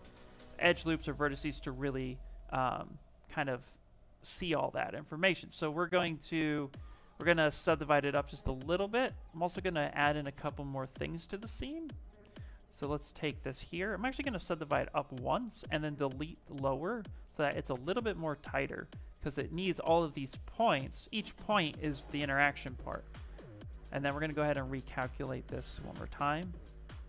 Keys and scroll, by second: 2.8 q, 13.0 shift+f, 13.3 shift+f, 13.9 ctrl+d, 17.0 shift+f, 17.4 shift+f, 22.3 s, 25.7 w.